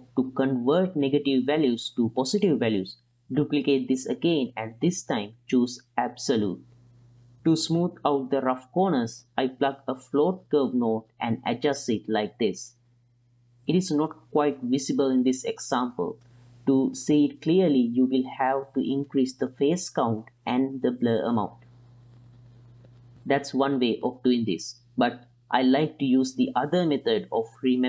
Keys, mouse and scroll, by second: 2.1 middle click, 3.1 middle click, 3.5 middle click, 3.9 click, 4.3 shift+d, 5.0-6.7 drag, 7.7 click, 9.0-11.0 drag, 11.2 ctrl+shift+click, 11.8 click, 12.4 click, 14.3 click, 15.3 middle click, 16.8 middle click, 18.7 middle click, 19.9 click, 20.4 click, 20.7 click, 21.2 click, 21.4 click, 22.0 middle drag, 23.0-24.5 drag, 25.2-26.9 middle drag.